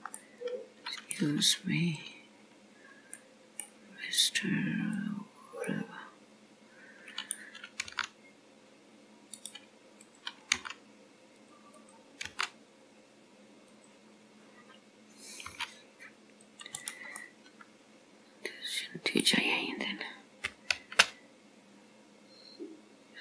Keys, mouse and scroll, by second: 0.3 middle click, 2.0 click, 3.3 middle click, 4.2 click, 5.0 click, 5.8 middle click, 5.8 scroll down 1, 7.9 g, 10.1 click, 10.6 g, 11.9 click, 12.3 g, 15.5 c, 17.3 middle click, 20.8 alt+m.